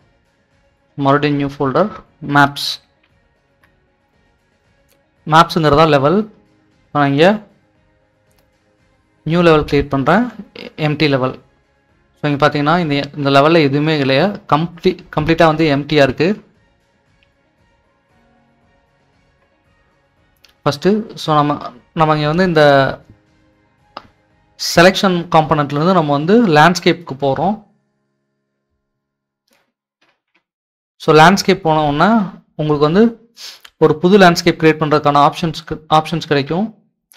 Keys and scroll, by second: 2.9-3.5 typing, 3.9 Return, 14.6-16.4 typing, 17.8-18.4 typing, 30.3-31.9 typing.